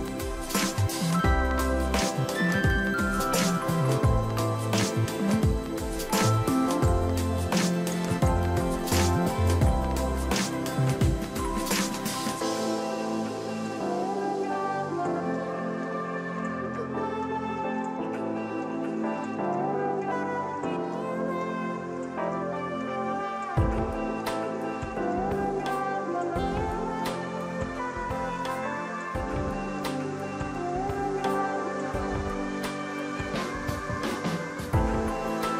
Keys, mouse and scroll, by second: 12.2 double click, 17.8 ctrl+t, 19.3 shift+click.